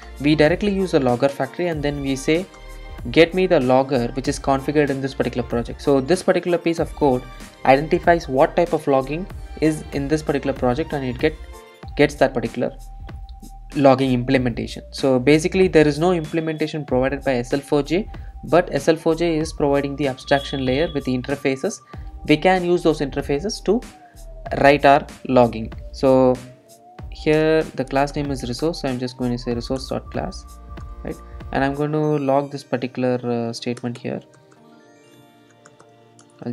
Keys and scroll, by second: 0.1 Return, 28.2 Return, 36.3 Return.